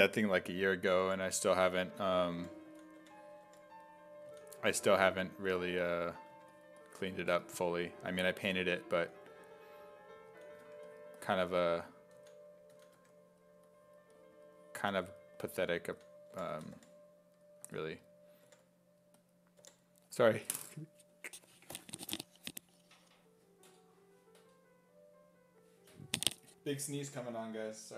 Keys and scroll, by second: 1.1 5, 2.2-4.6 typing, 6.3 1, 9.0 s, 10.3 s, 10.7 1, 12.2-13.5 typing, 15.7-18.5 typing.